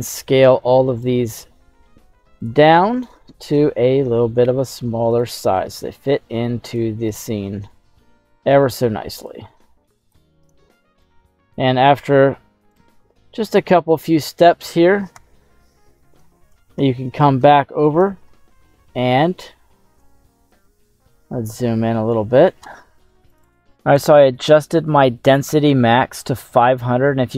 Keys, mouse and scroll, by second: 1.1 click, 1.7 ctrl+a, 2.9 right click, 3.6 s, 5.2 click, 5.5 ctrl+a, 7.1 right click, 7.7 s, 9.3 click, 9.6 ctrl+a, 10.4 right click, 11.0 s, 12.8 click, 13.0 ctrl+a, 13.7-15.2 scroll down 3, 15.2 /, 16.2 shift+middle click, 16.7 scroll up 1, 16.8 middle click, 17.5 shift+middle click, 18.3-19.9 ctrl+middle drag, 20.0 shift+middle click, 20.0 shift+scroll down 1, 20.8-22.0 ctrl+middle drag.